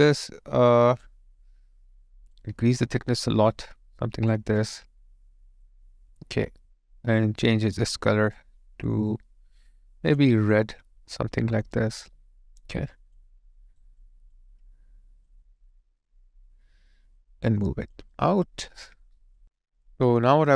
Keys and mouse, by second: 4.6 alt+click, 12.0 alt+right click, 12.7 alt+click, 13.5 alt+right click, 14.0 alt+click, 18.0 alt+click.